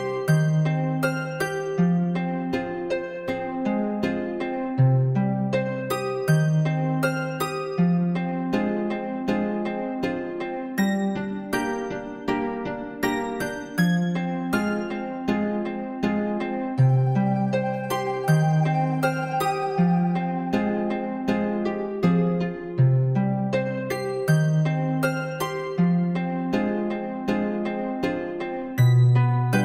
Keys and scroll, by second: 19.3 ctrl+b.